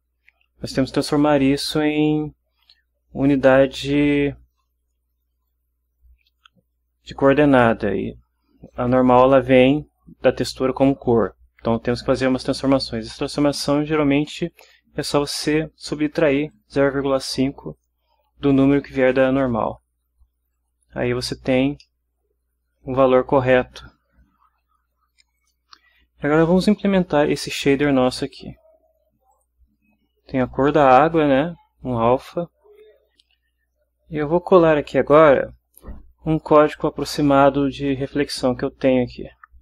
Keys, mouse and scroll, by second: 16.5-18.0 drag, 20.5 click, 21.8-24.8 middle drag, 25.4 click, 29.3 click, 33.1 Return.